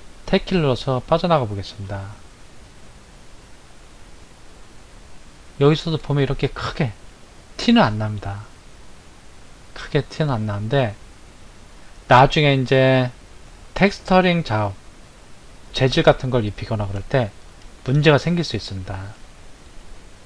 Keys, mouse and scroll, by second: 2.9 click, 4.3-7.3 middle drag, 8.3 scroll up 2, 10.3-13.3 middle drag, 13.3 click, 14.5-20.2 middle drag.